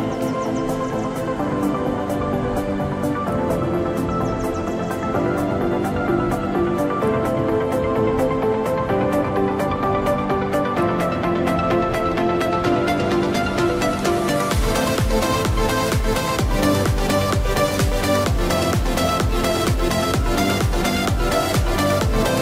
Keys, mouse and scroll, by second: 4.7-5.6 scroll up 1, 5.6 right click, 6.6 click, 16.4 ctrl+click, 17.7 ctrl+click, 18.8 ctrl+click, 21.1 ctrl+click.